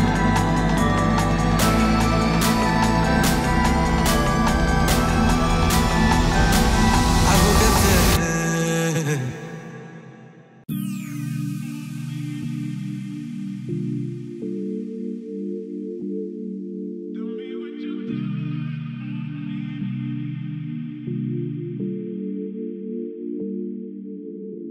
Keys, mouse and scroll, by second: 4.4 click, 6.6 click, 7.4 ctrl+space, 8.3-8.6 typing, 9.7 click, 10.7 scroll up 1, 11.6 click, 13.8 click, 14.5-15.4 typing, 16.3-20.2 drag, 21.3 2, 22.8 scroll up 1, 23.9-24.6 middle click, 24.5 scroll down 1.